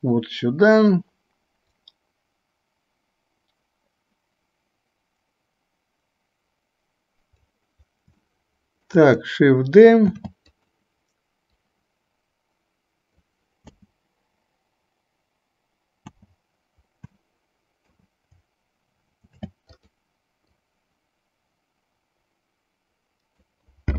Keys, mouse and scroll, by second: 1.9-7.5 drag, 8.4-9.1 shift+middle drag, 10.1 shift+d, 11.9-13.4 drag, 13.9 space, 16.2 space, 17.4-18.2 middle drag, 19.4 shift+d, 20.9-23.6 drag.